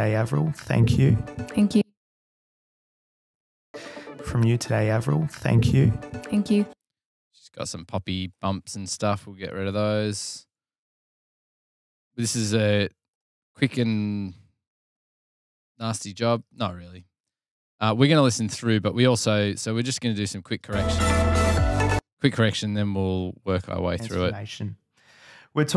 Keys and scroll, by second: 1.5 F7, 2.9 space, 3.5 super+], 3.6 super+], 5.9 F7, 7.6 Delete, 9.3 f, 10.8 Delete, 12.7 f, 13.5 super+[, 13.7 super+[, 13.8 super+[, 14.0 super+[, 14.2 super+[, 21.1 super+], 21.3 super+], 23.4 space, 23.9 super+].